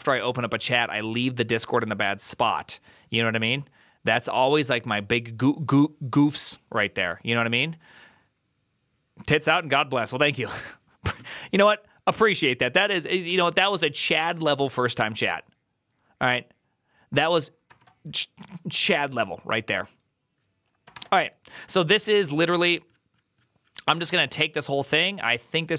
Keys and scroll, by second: 20.8 alt+f.